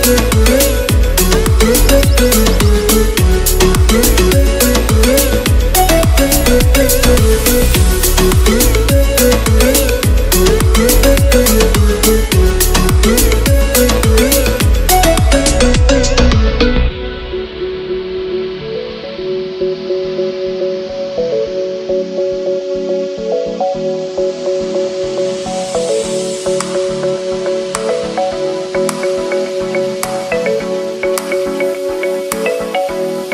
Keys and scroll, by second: 10.0 ].